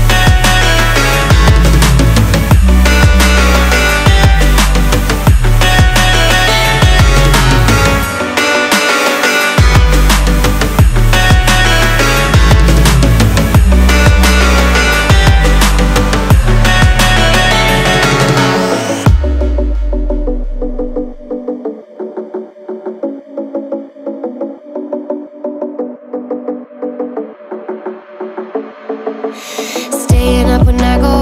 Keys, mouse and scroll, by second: 3.9-7.9 drag, 9.3 w, 13.5-16.6 drag, 18.2-21.2 drag, 24.5 drag, 25.0-31.2 drag.